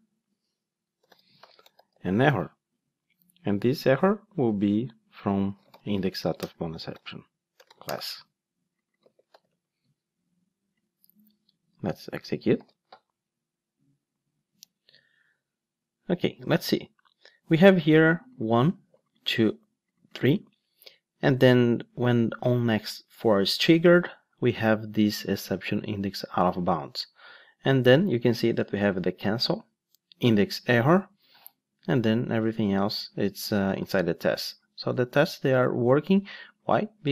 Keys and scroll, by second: 2.5 Return, 12.6 ctrl+shift+d.